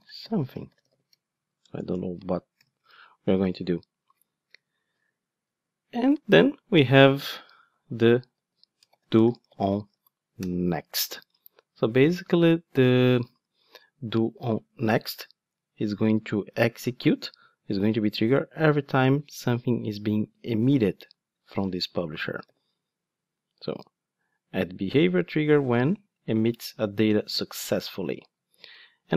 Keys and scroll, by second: 10.3 Return, 22.5 super+b.